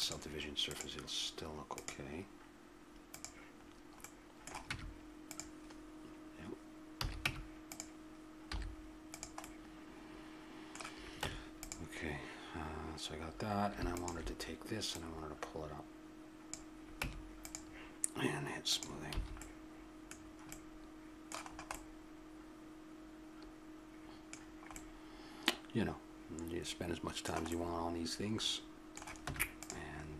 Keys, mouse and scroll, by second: 0.7-2.4 drag, 3.3-5.4 middle drag, 4.7 Tab, 7.0 a, 7.2 Tab, 8.5 z, 11.2 Tab, 13.9-16.8 drag, 17.0 Tab, 18.7 click, 19.1 a, 19.4-20.4 middle drag, 20.4-21.5 drag, 23.9 middle click, 26.6 middle click, 29.2 Tab, 29.7 middle click.